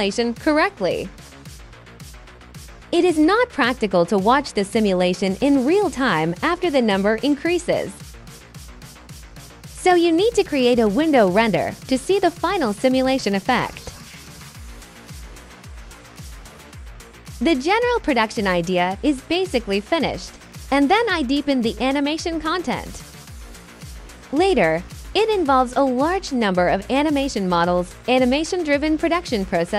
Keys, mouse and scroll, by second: 0.3-1.3 alt+drag, 2.8 alt+click, 3.0 alt+right click, 3.4 alt+click, 3.8 alt+click, 4.1 alt+right click, 4.6 alt+click, 5.3 alt+click, 5.6 alt+click, 6.2 alt+click, 6.5 alt+click, 6.8 click, 7.1 click, 7.5 click, 8.0 click, 8.1 click, 8.6 click, 9.2 KP_9, 9.4 KP_0, 9.5 click, 10.0 click, 10.3 click, 10.7 click, 11.1 KP_2, 11.3 KP_0, 12.2 ctrl+d, 13.1 click, 13.5 KP_2, 13.7 KP_0, 13.8 click, 14.2 click, 14.6 click, 15.2 click, 15.9 click, 17.4 drag, 18.1 click, 18.5 click, 18.9 click.